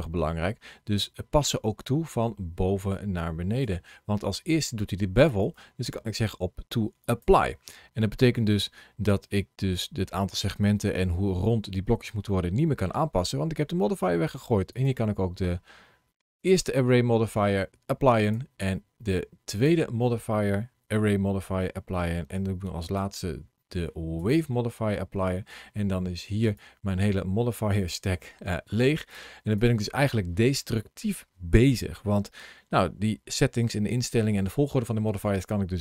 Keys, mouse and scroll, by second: 5.3 click, 7.8-8.7 scroll up 1, 8.7 scroll up 1, 9.1 middle click, 11.4 scroll down 2, 12.1 middle click, 14.6 click, 18.1 click, 22.7 click, 26.3 ctrl+shift+a, 29.0 click, 29.4 click, 31.0 middle click.